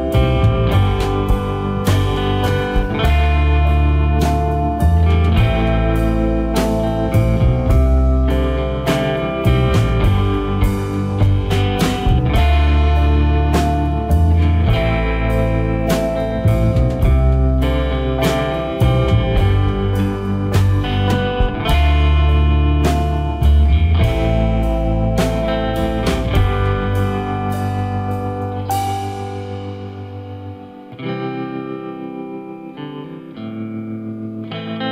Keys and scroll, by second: 9.2 ctrl+alt+shift+e, 14.7 ctrl+g, 28.3 Delete.